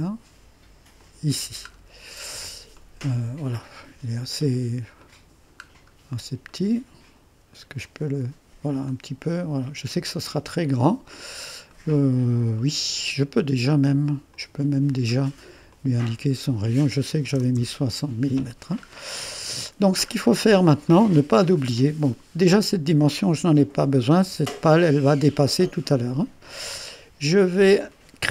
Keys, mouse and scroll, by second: 1.0 click, 2.8 right click, 3.6-5.1 scroll up 1, 5.1 click, 5.4 right click, 5.7-6.4 scroll down 1, 6.5 click, 6.7 right click, 7.9-10.5 drag, 11.3-11.8 scroll up 1, 11.8 right click, 12.6 right click, 14.3 click, 15.8 click, 16.3 click, 16.9-17.9 typing, 19.2-19.8 scroll up 1, 20.2-20.9 scroll up 1, 20.9 middle click, 22.7 click, 24.2 Delete, 25.3 middle click.